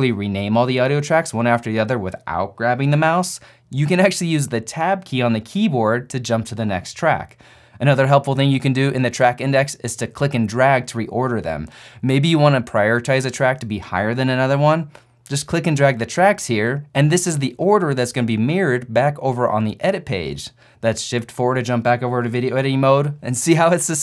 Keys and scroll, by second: 5.3 Tab, 6.3-9.6 typing, 21.4 shift+4.